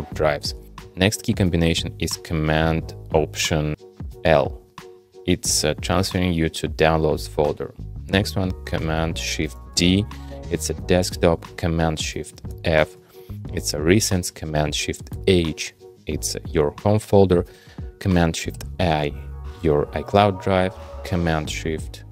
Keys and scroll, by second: 4.1 alt+super+l, 9.5 shift+super+d, 12.5 shift+super+f, 15.1 shift+super+h, 18.5 shift+super+i.